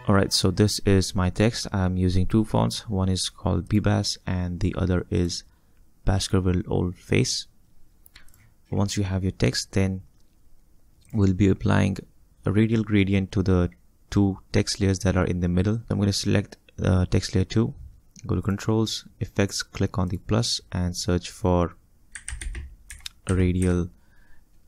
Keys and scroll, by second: 22.0-24.1 typing.